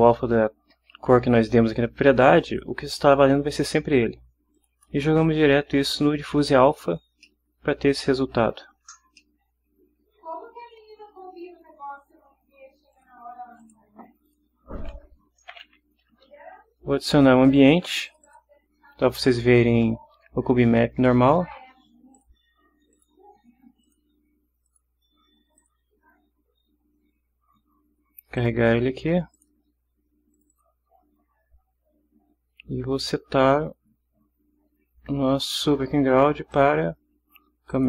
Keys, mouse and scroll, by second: 2.4 click, 4.5 click, 7.2-8.5 middle drag, 9.2-10.8 ctrl+middle drag, 12.9 click, 13.6 click, 14.2 click, 15.4 w, 15.5 o, 18.1 click, 22.1 click, 22.9 click, 23.8 click, 24.6 click, 25.6 click, 28.4 click, 29.3 click, 30.3 click, 36.5 click, 37.7 click.